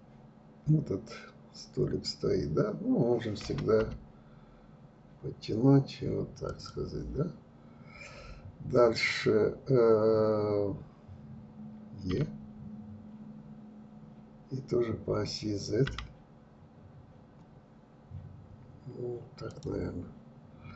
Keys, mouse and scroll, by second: 11.7 e, 19.6 scroll down 2.